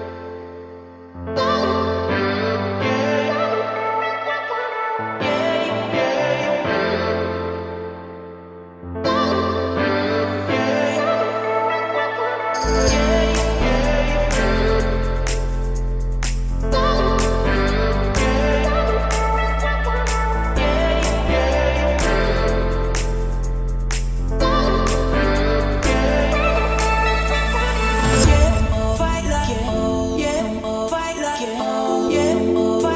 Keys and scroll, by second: 3.3 Escape, 8.1 Escape, 24.8 Escape, 25.6 Escape.